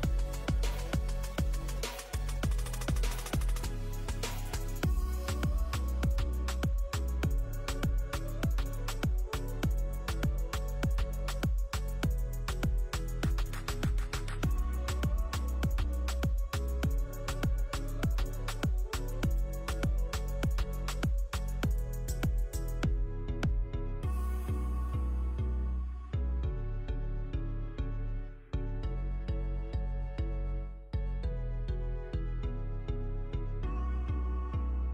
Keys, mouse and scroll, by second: 0.2 middle click, 0.7 shift+a, 1.9 middle click, 2.3 g, 2.9 s, 3.8 s, 4.4 click, 4.5 Tab, 4.6 click, 5.0 click, 5.5 click, 5.8 g, 6.5 KP_3, 6.9 e, 7.4 middle click, 7.7 g, 8.4 middle click, 8.9 click, 9.4 g, 9.9 scroll up 2, 10.2 click, 11.2 g, 12.2 click, 12.4 middle click, 12.6 scroll down 2, 12.9 ctrl+b, 14.7 middle click, 15.2-15.8 scroll down 3, 16.0 middle click, 17.2 ctrl+z, 17.6 click, 17.9 g, 18.2 click, 18.5 ctrl+b, 19.7 middle click.